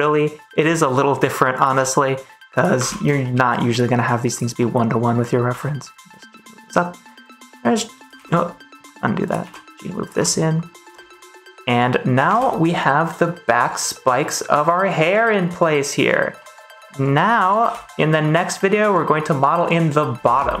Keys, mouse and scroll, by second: 0.8 shift+middle click, 1.6 g, 2.4 click, 2.7 ctrl+s, 3.1 shift+middle click, 3.2 shift+click, 4.2 click, 4.5 middle click, 5.4 g, 5.8 click, 6.0 middle click, 6.6 middle click, 7.2 click, 7.3 g, 8.1 ctrl+z, 9.1 click, 9.3 g, 9.9 click, 10.1 middle click, 11.1 middle click, 12.2 ctrl+s, 16.3 middle click, 16.8 middle click, 17.6 ctrl+s, 17.8 middle click, 17.8 click.